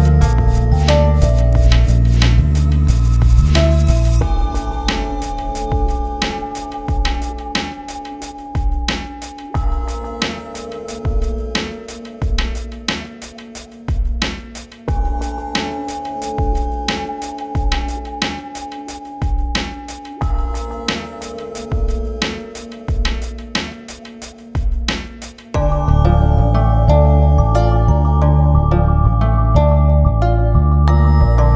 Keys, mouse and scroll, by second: 0.4-0.7 scroll up 1, 0.7 click, 0.8 F4, 0.9 click, 1.8 scroll down 1, 2.1-2.8 scroll up 1, 2.9-3.2 scroll up 1, 3.4 click, 4.6 scroll down 1, 5.4 click, 5.8 right click, 6.0 click, 7.1-7.7 scroll down 1, 7.8 click, 8.3-8.6 scroll down 1, 8.6 click, 9.7-10.2 scroll down 2, 10.7 scroll down 1, 11.3 click, 11.8 click, 13.4 click, 13.5 click, 13.8 scroll down 1, 13.9 click, 13.9 scroll up 1, 14.0 click, 14.6 scroll down 1, 14.8 click, 15.3-16.0 typing, 15.3-15.7 scroll down 2, 15.4 click, 16.0 click, 16.3 right click, 16.4 click, 16.7 scroll down 1, 17.2 click, 17.5 scroll down 1, 17.8 click, 18.4 scroll down 1, 18.6 click, 19.2 scroll down 1, 20.4 scroll up 1, 20.6 click, 21.2 click, 22.3-22.6 scroll down 1, 23.2 click.